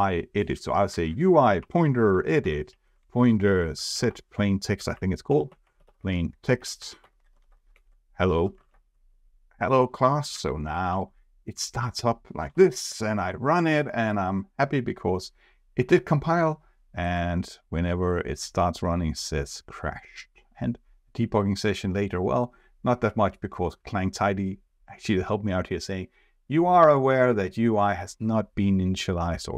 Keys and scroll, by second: 12.9 ctrl+r.